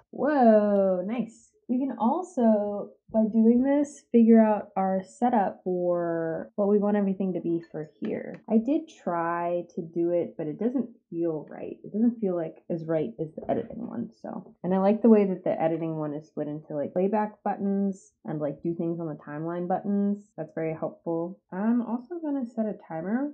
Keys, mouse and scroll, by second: 0.0 space.